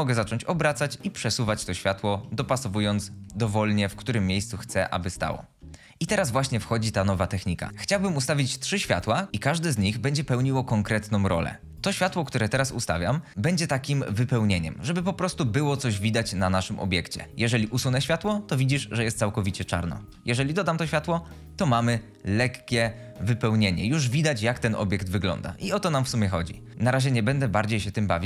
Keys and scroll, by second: 0.3 g, 2.5 g, 4.8-5.2 typing, 11.7-12.9 typing, 17.5 x, 19.9 ctrl+z.